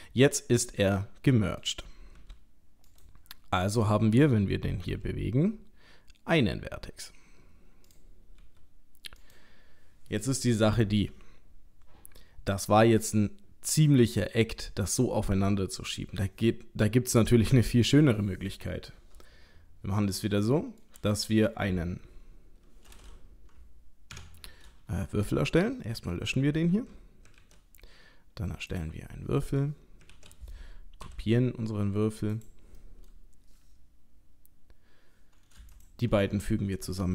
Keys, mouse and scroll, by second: 3.7 click, 4.9 g, 8.4 g, 19.0-19.7 scroll down 1, 19.7-20.3 scroll down 2, 20.4 shift+middle click, 21.1 click, 24.1 Tab, 25.2 Delete, 27.3 shift+a, 30.1 shift+d, 32.8 middle click, 34.2-35.5 scroll up 2, 35.7 shift+click.